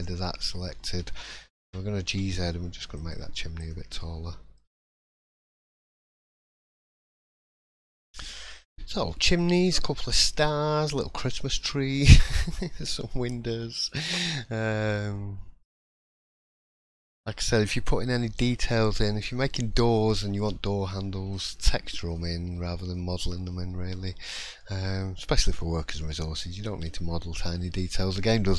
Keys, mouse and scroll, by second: 0.2 middle click, 0.2 scroll up 1, 0.6-1.5 scroll down 4, 1.6 g, 3.6 click, 4.0 middle click, 4.8 shift+middle click, 6.3 middle click, 8.0-8.4 scroll down 1, 8.5 shift+middle click, 10.5 shift+middle click, 10.5-11.1 scroll up 2, 11.5 shift+middle click, 12.3-12.8 scroll up 1, 13.6 scroll down 2, 13.9 middle click, 14.3 shift+middle click, 14.8 scroll up 1, 15.1 middle click, 15.8 shift+middle click, 16.2 scroll up 1, 16.4 middle click, 20.9 shift+middle click, 22.1 middle click, 22.5 scroll down 2, 22.9 shift+middle click, 23.7 scroll down 1, 24.1 middle click, 24.6 shift+middle click, 25.2 middle click, 25.6 scroll down 2, 26.0 shift+middle click, 27.2 middle click.